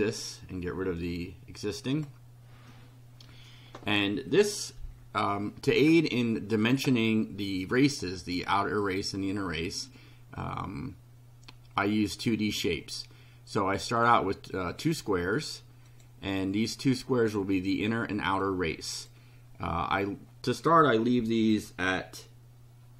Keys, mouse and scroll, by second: 1.9 click, 11.9 click, 14.0 click, 15.9 click, 17.0 click, 18.4 click.